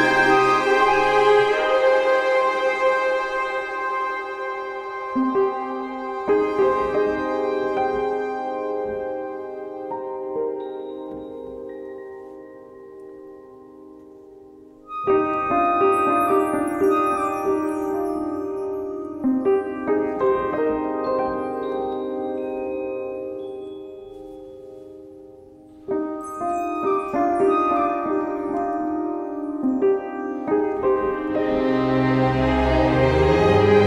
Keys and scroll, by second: 8.3 alt+shift+Return, 9.0 Return, 28.0 alt+shift+Return, 28.8 Return.